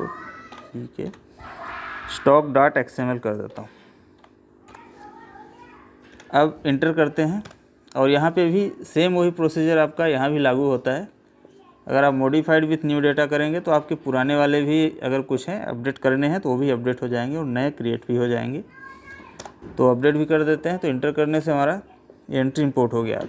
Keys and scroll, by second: 6.1 Delete, 21.3 Escape.